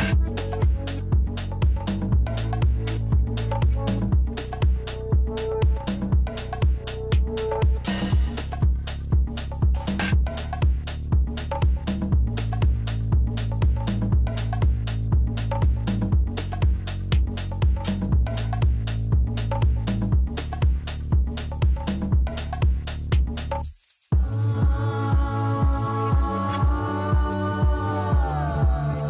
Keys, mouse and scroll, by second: 2.7-4.5 scroll up 2, 4.5-7.6 drag, 8.3-10.1 scroll down 1, 10.1-13.3 drag, 17.7-20.8 drag.